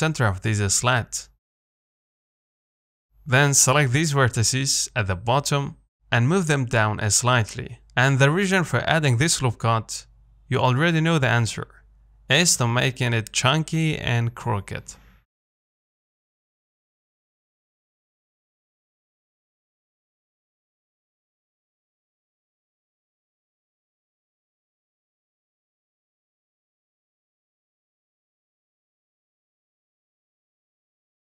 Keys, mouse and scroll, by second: 0.0 middle click, 0.6 z, 1.1-2.5 scroll up 1, 2.5 scroll up 1, 2.6-3.9 shift+middle drag, 3.9 click, 5.2 g, 8.6 Tab, 8.8-9.3 scroll down 4, 9.3 middle click, 9.7 scroll up 2, 10.2 Tab, 11.1 g, 12.3 Tab, 12.6-14.1 middle drag, 14.1 click, 14.6-17.1 shift+middle drag, 17.1-17.5 scroll down 3, 17.5 shift+middle click, 18.3-19.0 scroll up 1, 19.1 click, 19.6-20.1 scroll down 2, 20.5-21.5 middle drag, 21.5 click, 21.8 shift+middle click, 22.1 scroll up 2, 22.3 Tab, 22.5 middle click, 23.0 z, 23.4-24.8 middle drag, 24.8 click, 25.3 KP_7, 26.5 g, 29.0 z, 29.2-31.1 middle drag, 31.1 g.